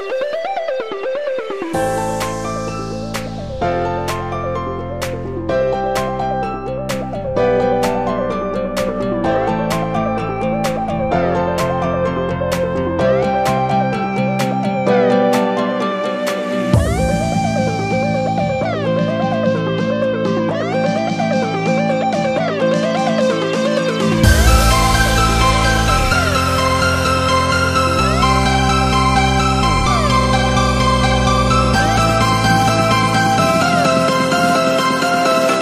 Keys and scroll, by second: 13.7 super+-, 13.9 super+-, 14.1 super+-, 14.6 super+-, 15.1 super+=, 15.4 super+=, 32.2 super+-, 32.5 super+-, 32.7 super+-, 32.9 super+-, 33.2 super+-, 33.6 super+-, 34.6 super+=, 34.9 super+=.